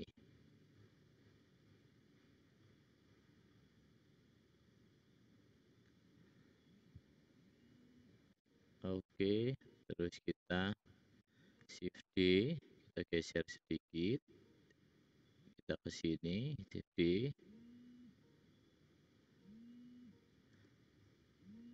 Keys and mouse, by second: 8.3 `, 12.0 shift+d, 16.9 shift+d, 20.6 g.